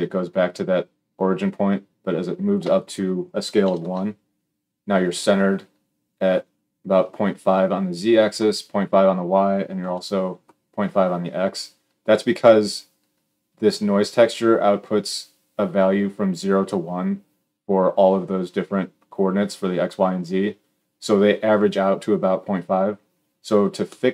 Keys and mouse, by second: 9.6 KP_1.